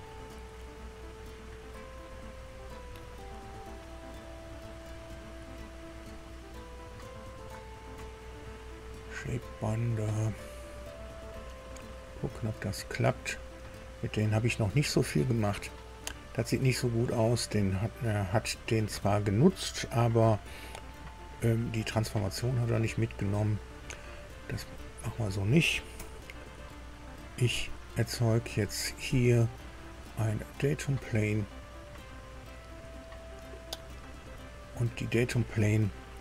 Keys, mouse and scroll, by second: 2.3 click, 4.2 click, 6.4 scroll down 1, 8.3 click, 11.0 click, 12.6-12.9 scroll down 1, 13.6 click, 16.1 scroll down 1, 16.6 scroll up 1, 24.9 click, 25.9 Delete, 28.8 click, 29.7 click, 30.9 click, 32.5 click, 33.9 scroll down 2.